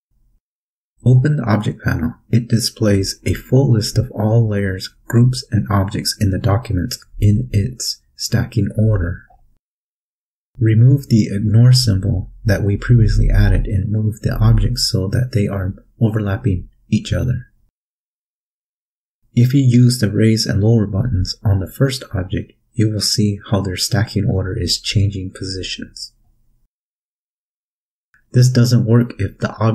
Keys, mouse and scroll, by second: 0.4 click, 1.4 click, 3.3 click, 11.5 click, 12.6 click, 13.9 Delete, 16.1 click, 16.8-18.0 drag, 21.6 click, 23.1 click, 24.3 click, 25.5-26.5 drag, 27.4 click, 28.2 click, 29.0 click.